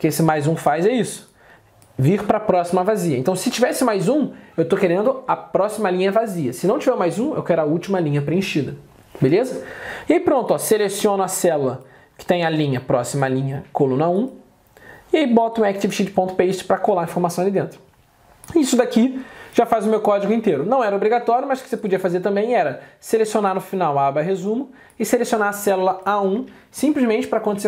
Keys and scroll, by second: 26.5 alt+Tab.